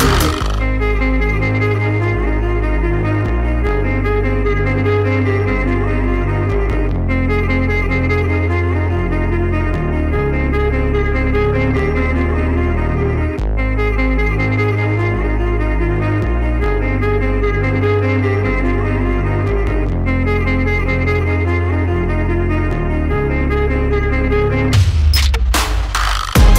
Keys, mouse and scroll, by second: 0.7 alt+scroll up 1, 1.9 Right, 2.1 Right, 2.3 Right, 2.5 Right, 2.8 Right, 3.0 Up, 3.3 Up, 3.6 Right, 3.8 Right, 4.1 Right, 4.5 Left, 6.7 Left, 6.9 Left, 7.1 Down, 7.4 Up, 7.6 Left, 7.9 Down, 8.2 Right, 8.3 Right, 9.5 click, 9.9 alt+scroll down 1, 11.4 alt+scroll up 1, 11.9 alt+scroll down 1, 13.1 alt+scroll up 1, 16.2 click, 18.8 double click, 19.1 click, 20.0 click, 23.5 click, 23.9 alt+scroll up 1, 24.5 click.